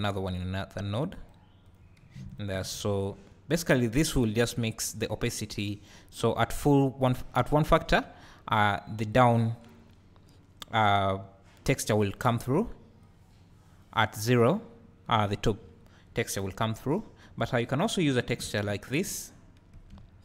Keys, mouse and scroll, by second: 2.3-3.0 ctrl+shift+drag, 4.9-9.2 drag, 13.0-17.7 drag, 18.5 ctrl+shift+click, 20.0 `.